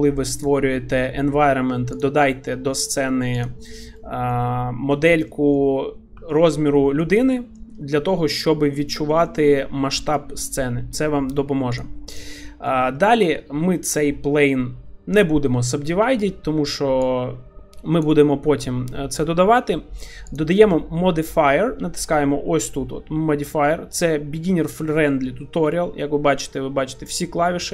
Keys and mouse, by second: 0.1 click, 2.0 click, 3.3 click, 4.3-5.0 middle drag, 5.3 middle drag, 6.3 shift+middle click, 6.7 middle click, 7.4 middle click, 8.1-8.7 middle drag, 9.1 shift+middle click, 9.5-10.1 middle drag, 11.8 click, 12.5 middle click, 13.0 shift+middle click, 13.7 shift+middle click, 17.2 click, 24.5 middle click, 25.1-25.6 shift+middle drag.